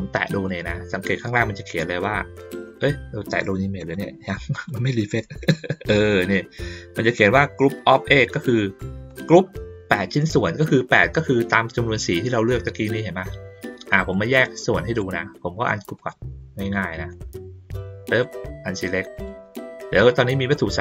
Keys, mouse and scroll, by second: 3.8 click, 4.5 click, 9.1-10.6 drag, 14.1 click, 15.9 click, 16.7 middle click, 18.1 click, 19.1 click.